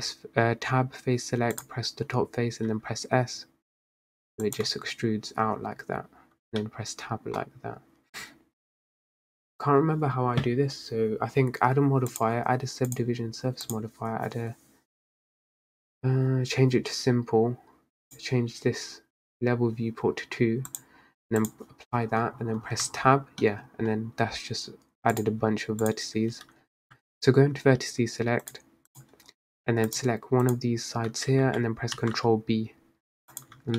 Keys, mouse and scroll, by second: 2.7 s, 4.8 Tab, 6.7 middle click, 7.4 scroll down 2, 8.4-9.7 scroll up 2, 13.1 click, 18.2-22.9 drag, 22.9 Tab, 23.6 middle click, 23.7-25.3 scroll up 2, 25.3 click, 26.9 ctrl+b, 27.0 ctrl+z, 27.1-27.7 scroll down 5, 28.6 click, 29.4-29.7 scroll up 4, 30.0 click, 30.6 click, 32.1 ctrl+b, 33.6 Tab.